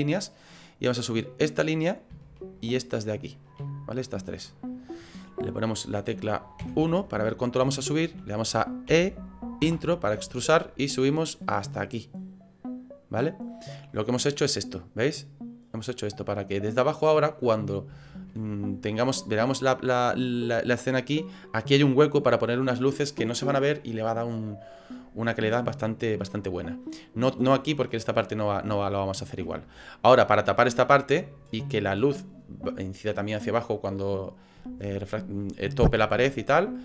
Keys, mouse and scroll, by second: 0.2 middle click, 1.3 right click, 2.5 shift+right click, 3.2 right click, 3.8 middle click, 6.7 KP_1, 7.4 scroll up 4, 7.8 shift+middle click, 8.9 e, 10.8 click, 13.9 middle click, 18.1 shift+middle click, 18.4 middle click, 19.0 middle click, 19.5 scroll down 3, 20.1 middle click, 26.4 middle click, 28.8 shift+middle click.